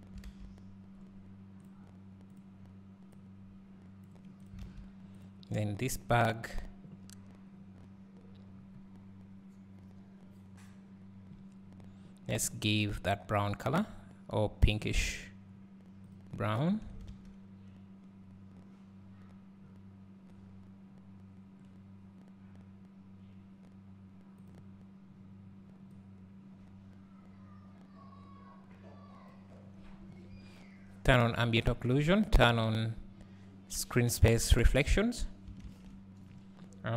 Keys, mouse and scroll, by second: 1.7 click, 10.3 click, 17.1 alt+a, 20.4-28.5 drag, 31.4 click, 36.3 scroll up 1.